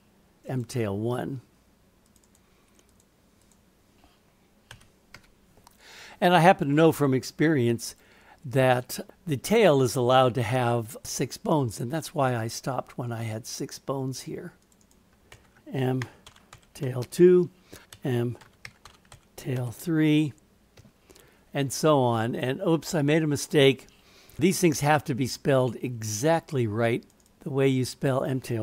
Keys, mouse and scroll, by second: 2.3-6.8 drag, 7.8 click, 14.6 click, 14.8-21.8 drag, 27.3-28.6 drag.